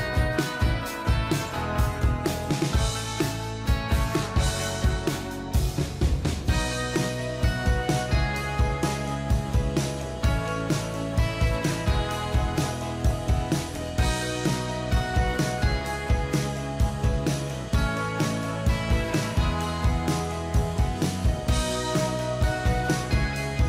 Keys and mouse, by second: 6.0-10.7 typing, 12.6-14.2 typing, 14.8 ctrl+a, 21.2 click.